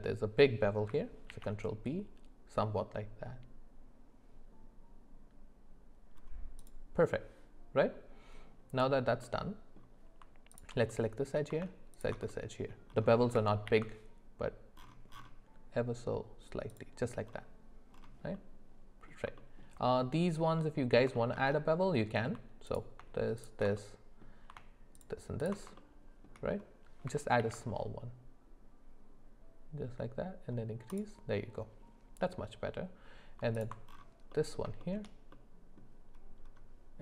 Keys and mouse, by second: 1.3 ctrl+b, 9.2 middle click, 10.5 alt+click, 10.9 middle click, 11.9 alt+shift+click, 12.3 middle click, 13.7 ctrl+b, 18.3 middle click, 19.4 shift+middle click, 20.6 middle click, 21.1 shift+middle click, 21.8 middle click, 21.9 click, 21.9 middle click, 23.4 alt+shift+click, 23.8 middle click, 25.4 alt+shift+click, 25.8 shift+middle click, 27.4 ctrl+b, 34.3 middle click, 34.8 shift+middle click, 35.3 middle click.